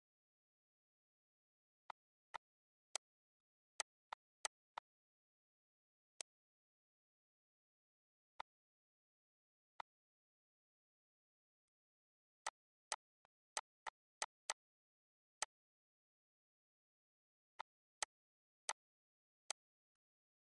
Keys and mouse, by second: 1.7 shift+click, 2.9 click, 5.9 click, 8.2 click, 9.4 click, 11.2 shift+click, 12.3 shift+click, 13.4 shift+click, 14.3 click, 16.4 click, 17.4 click, 18.1 shift+click.